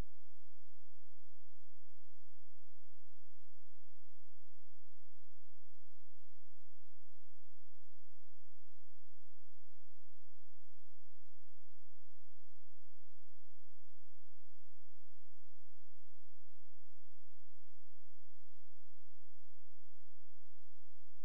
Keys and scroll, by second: 5.1 space, 11.2 space.